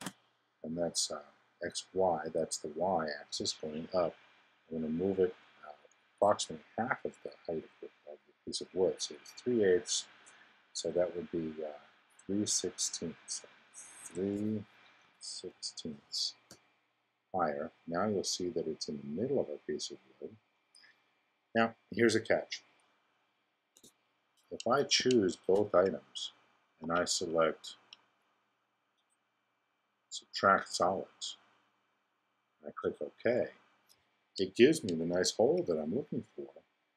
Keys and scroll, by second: 0.0 Tab, 14.0 3, 15.5 6, 23.7 x, 35.1 i.